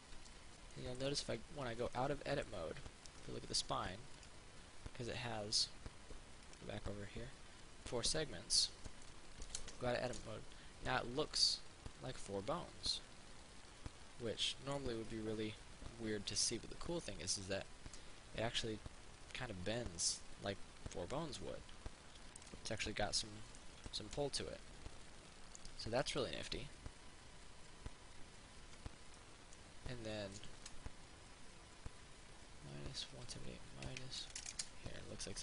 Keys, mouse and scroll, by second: 0.9-2.1 middle drag, 3.0 scroll up 1, 4.4 right click, 6.7 click, 11.1-15.0 middle drag, 15.0-23.1 drag, 23.1 middle click, 23.9 ctrl+z, 24.3-30.5 middle drag, 30.8 Tab, 33.3 click, 34.5 KP_1.